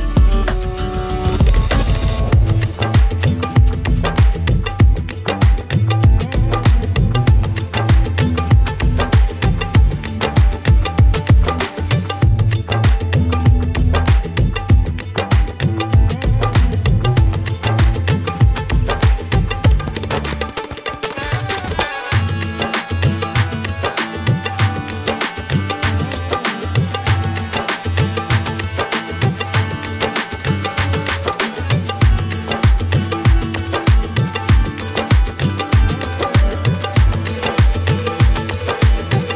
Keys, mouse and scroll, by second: 0.3 click, 0.5 click, 2.6 middle click, 2.9-4.8 drag, 3.2 middle click, 3.9 middle click, 4.8 scroll up 5, 5.0 middle click, 5.7-8.4 drag, 6.9 BackSpace, 7.0 BackSpace, 7.0 BackSpace, 10.0 click, 10.3 middle click, 10.6 click, 11.6 click, 12.6 click, 13.7 click, 13.9-14.3 middle drag, 14.3 click, 15.2-16.3 drag, 18.5 click, 19.2 middle click, 20.1-21.3 drag, 23.2 click, 23.3 shift+a, 23.8 click, 24.0 drag, 26.4 middle click, 26.6-28.5 drag, 28.7-31.7 drag, 33.6 click, 34.3 shift+a, 35.7 ctrl+shift+right click, 36.0-37.9 drag, 39.1 click.